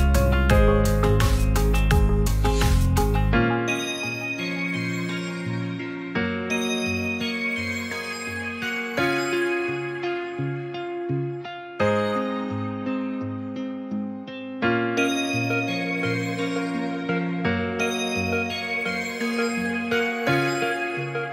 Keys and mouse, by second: 0.0 click, 10.6-12.1 middle drag, 12.6 middle drag, 13.3-14.2 middle drag.